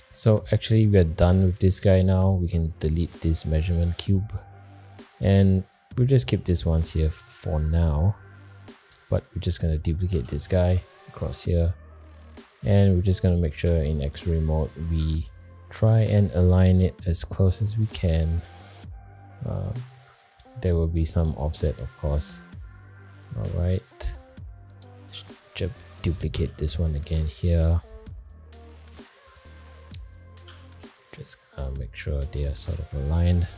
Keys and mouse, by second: 0.5 click, 2.4 x, 4.3-4.7 shift+middle drag, 7.2-7.6 shift+middle drag, 10.1 shift+d, 11.6 alt+middle click, 12.2 alt+middle click, 12.7 alt+middle click, 13.6 alt+z, 14.6-14.9 shift+middle drag, 15.7 g, 21.1-21.5 middle drag, 23.2 alt+middle click, 23.8 alt+middle click, 24.2 alt+middle drag, 24.8 shift+middle click, 26.3 shift+d, 28.9 shift+middle drag, 30.4 g.